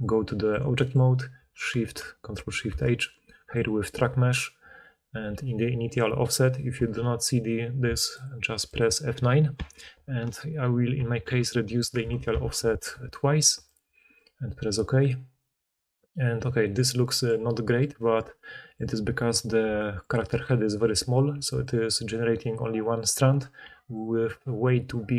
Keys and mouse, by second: 2.3 ctrl+shift+h, 15.7-25.1 drag, 21.3-23.3 d, 23.6 d.